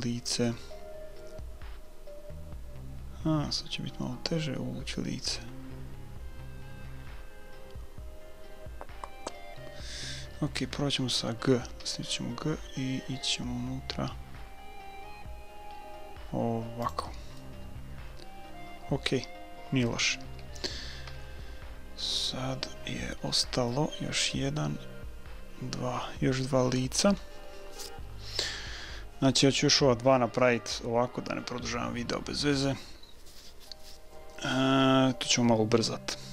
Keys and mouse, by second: 11.8 g, 17.5-19.2 middle drag, 20.2 a, 21.1 KP_1, 23.3-25.5 middle drag, 25.6-32.4 middle drag.